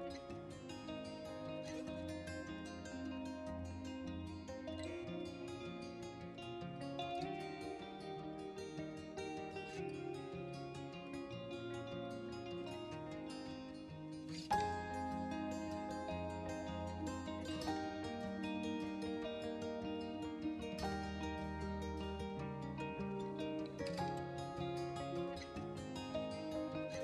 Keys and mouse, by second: 0.6-1.0 middle drag, 2.1 r, 2.2 z, 3.0 click, 3.5 g, 3.9 shift+z, 5.3 drag, 5.6-7.3 middle drag, 7.7-8.1 middle drag, 8.7 r, 9.0 z, 9.8 click, 10.0 g, 10.4 shift+z, 11.4 click, 11.7 r, 11.9 x, 12.7 Escape, 12.9 r, 13.1 z, 13.7 drag, 14.2 click, 15.0 g, 15.4 shift+z, 18.2 click, 18.6 r, 18.8 z, 20.1 click, 20.6 click, 20.9 g, 21.3 shift+z, 22.3 click, 23.4 shift+g, 23.5 shift+z, 24.7 click, 24.9 r, 25.1 z.